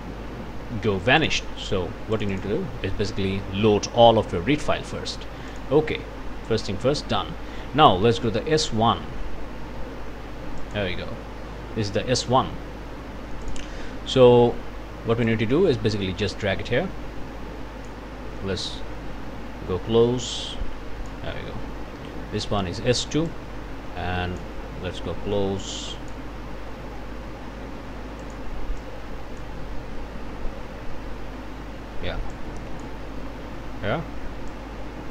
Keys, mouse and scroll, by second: 1.2 click, 2.1 click, 3.7-4.7 scroll down 3, 5.5 click, 6.6-7.2 scroll down 1, 7.4 scroll up 1, 10.6 click, 13.4 click, 15.2-18.1 drag, 18.2-19.6 scroll up 1, 19.7 scroll up 1, 20.3-21.3 drag, 21.3-22.9 scroll down 1, 23.3-24.6 drag, 24.7-25.5 scroll up 1, 25.6 click, 28.2 click, 28.8 click, 29.7-30.2 scroll down 1, 31.3-31.8 scroll up 1, 32.3 click, 33.5-34.2 scroll up 1, 34.5-35.1 drag.